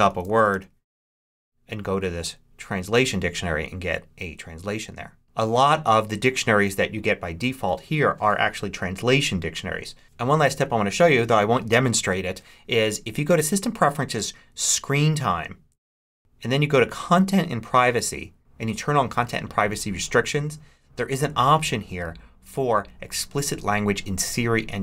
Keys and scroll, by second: 0.0-0.9 typing.